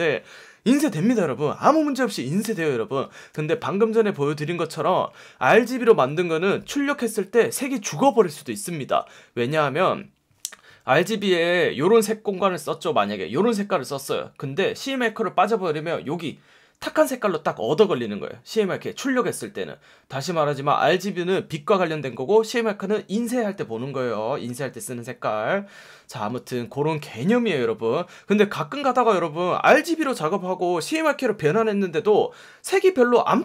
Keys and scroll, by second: 11.3 F1, 24.4 F1.